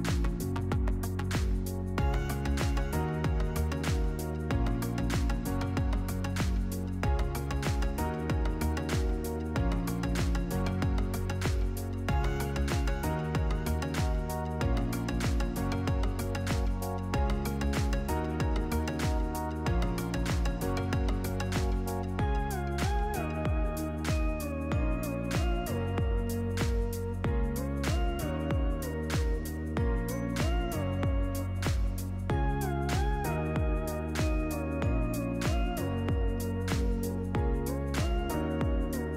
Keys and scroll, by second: 1.0 1, 1.8 Return, 9.1 Up, 14.4-15.7 typing, 18.9 ctrl+z, 22.4 1, 22.6 Tab, 22.8 1, 23.2 Return, 23.8 ctrl+-, 32.2 Up.